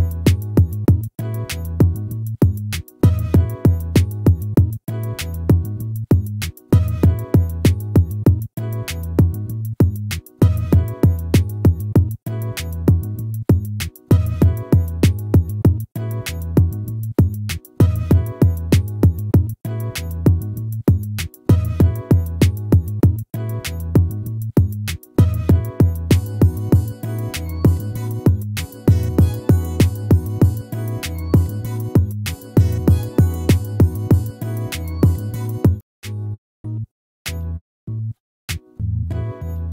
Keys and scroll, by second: 12.7 ctrl+z, 16.8 ctrl+z, 25.4 ctrl+z, 34.9 ctrl+z.